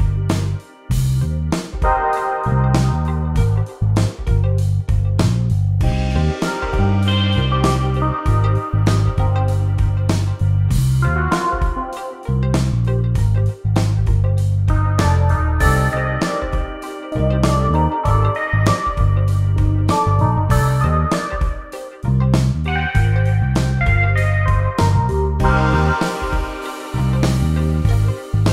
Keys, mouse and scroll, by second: 6.0 click, 9.5 KP_5, 10.6 click, 12.2 KP_5, 12.9 click, 14.8 click, 16.5 click, 19.8 BackSpace, 22.3 KP_1, 22.5 KP_0, 25.1 click, 25.6 click, 27.6 click.